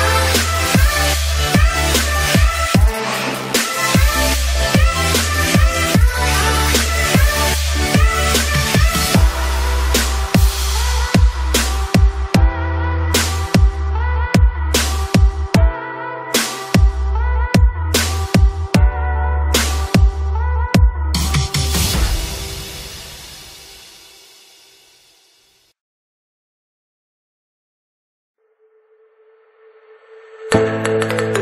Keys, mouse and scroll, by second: 1.6 space, 1.7 click, 1.9 space, 3.5-4.1 typing, 3.5 click, 3.7 ctrl+click, 6.3-8.8 typing, 7.3 click, 8.2 alt+click, 8.5 click, 8.9-10.4 drag, 11.0 space, 11.5 ctrl+click, 11.7 ], 11.9-15.0 drag, 15.0-16.8 typing, 15.2 click, 16.7 ctrl+d, 16.7 click, 17.0 click, 17.9 click, 18.9 space, 18.9 alt+click, 20.3 space, 20.4 ctrl+click, 21.7 click, 22.5 ctrl+click, 23.2 ctrl+click, 23.4 space, 23.5 alt+click, 23.9 ], 24.4 [, 25.7-27.2 typing, 25.8 ctrl+click, 27.0 click, 27.2-29.0 drag, 29.0-30.4 typing, 29.1 alt+click, 29.5 click, 30.6 click.